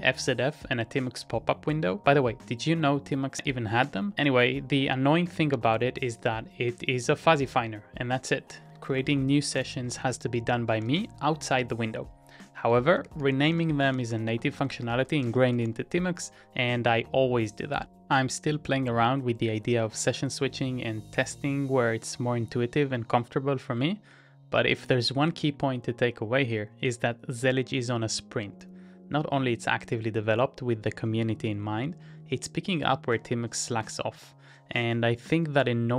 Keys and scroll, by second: 0.0 Up, 1.0 Return, 3.7 ctrl+a, 4.1 shift+k, 5.3 Up, 5.7 Return, 8.9-11.2 typing, 12.5-16.2 typing.